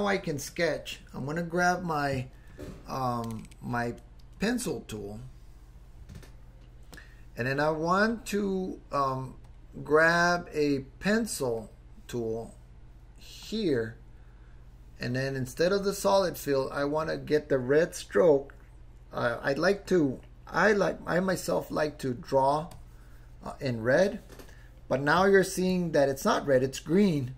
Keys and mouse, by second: 5.1 click, 8.2-9.2 drag, 9.5 click, 11.6-13.7 drag, 15.5-21.5 drag, 22.7 click.